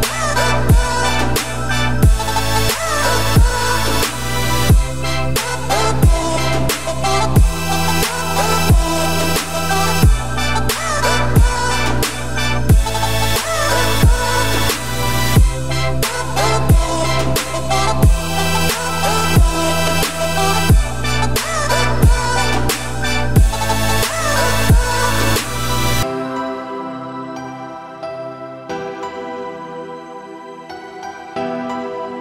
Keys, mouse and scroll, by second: 1.9 middle click, 2.3 e, 5.0 click, 5.8 x, 6.8 scroll down 1, 7.0 middle click, 7.4 click, 7.7 middle click, 7.9-8.3 scroll up 2, 8.3 shift+d, 9.3 p, 10.1 Tab, 10.4 click, 10.8 middle click, 11.0 Tab, 11.4 `, 11.7 1, 12.1-12.5 scroll up 2, 12.5 ctrl+r, 16.5 middle click, 16.7 2, 17.7 click, 18.5-19.1 scroll down 3, 19.1 shift+middle click, 19.9 ctrl+b, 23.3 shift+click, 24.5 3, 25.4 ctrl+i, 26.4 middle click, 26.8 e, 29.2 middle click, 29.5 a, 29.8-30.2 scroll up 2, 30.2 g, 31.9 scroll down 2, 32.1 Tab.